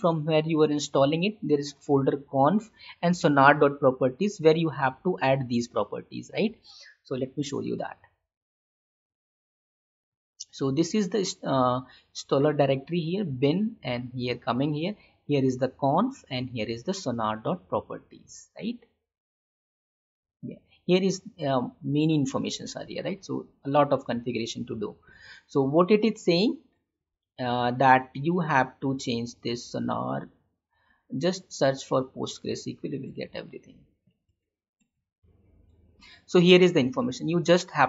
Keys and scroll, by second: 7.9 alt+Tab, 25.2 Tab, 26.5 alt+Tab, 32.6 ctrl+c, 33.1 alt+Tab, 34.3 alt+Tab.